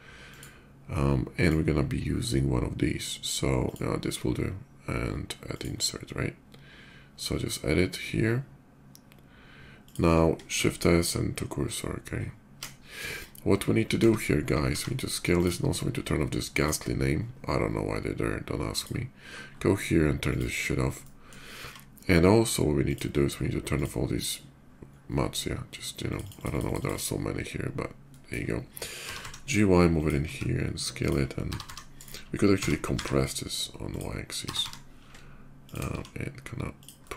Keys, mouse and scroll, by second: 1.0 click, 3.4 click, 5.3 click, 9.6 click, 10.9 shift+s, 11.5 shift+s, 13.4 middle click, 14.3 s, 15.1 click, 16.1 click, 16.8 scroll down 1, 18.5 click, 19.0 scroll down 1, 19.9 click, 20.3 scroll up 1, 20.7-21.0 middle drag, 22.6 click, 22.6 s, 23.5 click, 24.8-25.9 middle drag, 25.9 click, 26.0 click, 26.1 click, 26.3 click, 26.4 click, 26.6 click, 26.7 click, 26.9 middle drag, 27.9 middle click, 28.8 g, 29.7 y, 29.7 click, 30.0 s, 30.8 click, 31.1-32.7 typing, 31.7 right click, 33.7 click, 34.2 g, 34.5 y, 35.4 shift+click, 35.7 s, 36.5 click, 36.7 middle click.